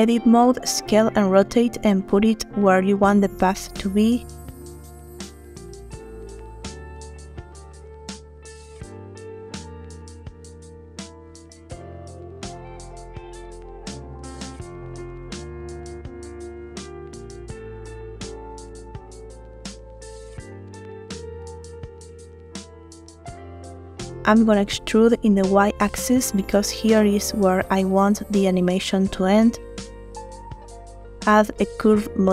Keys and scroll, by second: 0.3 a, 0.9 s, 5.1 9, 5.3 Return, 5.3 0, 7.9 s, 12.8 9, 12.9 0, 13.1 Return, 14.9 a, 20.5 typing, 20.9 Return, 25.3 e, 25.7 y, 28.4 Tab.